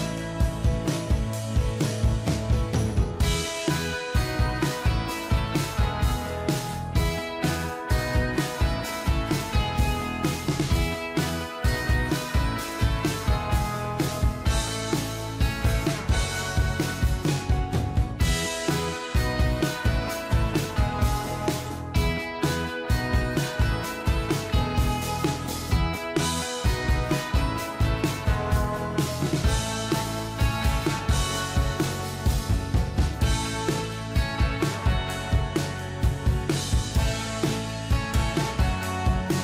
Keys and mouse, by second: 1.5 ctrl+j, 2.3 shift+click, 11.1 double click, 12.0 double click, 12.6 space, 12.8 o, 14.4 f, 14.7 f, 18.1 ctrl+click, 21.2 ctrl+j, 22.2 ctrl+click, 31.6-33.8 typing, 34.3 Return, 34.9 l, 35.1 o, 35.4 g, 36.1 ctrl+a.